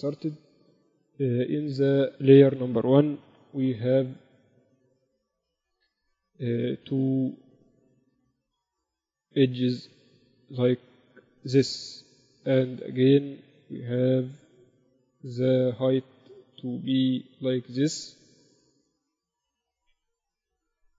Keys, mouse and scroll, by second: 2.5-4.3 drag, 3.7 KP_1, 4.8-6.7 right drag, 5.2 Tab, 5.9 ctrl+r, 6.7 middle click, 8.8 s, 13.7 ctrl+r.